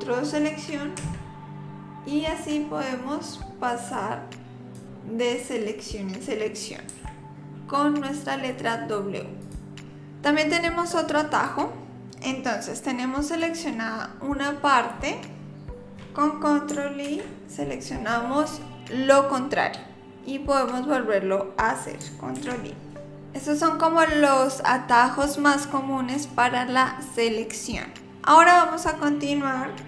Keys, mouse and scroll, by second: 1.0 w, 3.3 click, 6.9 w, 9.4 click, 11.4 click, 17.1 ctrl+i, 22.4 ctrl+i.